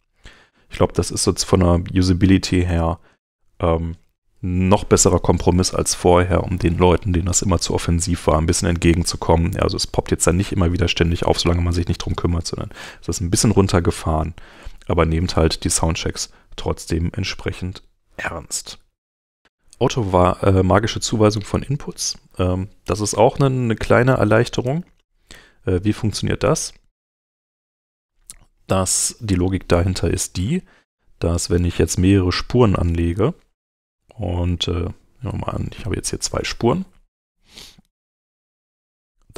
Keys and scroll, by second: 18.8 super+Tab, 21.9 super+Tab, 24.6 BackSpace, 25.3 Return.